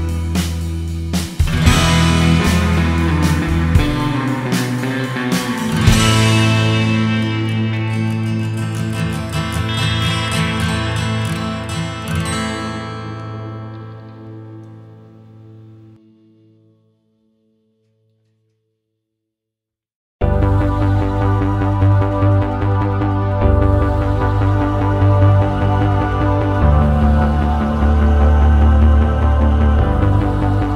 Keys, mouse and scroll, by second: 0.1 click, 2.5-3.1 scroll up 3, 3.2 click, 5.0 middle click, 5.6 click, 8.3-9.8 scroll down 11, 9.8 middle click, 11.6-12.0 scroll down 4, 12.0 middle click, 13.7 click, 14.0-15.2 scroll up 8, 15.2 click, 16.4 scroll down 3, 17.2 click, 17.6-18.4 scroll up 7, 18.6 click, 20.5-21.8 scroll up 7, 21.2 middle click, 22.5-23.4 scroll up 6, 23.5 middle click, 24.0-24.4 scroll up 2, 24.4 middle click, 25.8 click, 27.9-28.4 scroll down 2, 30.0 space.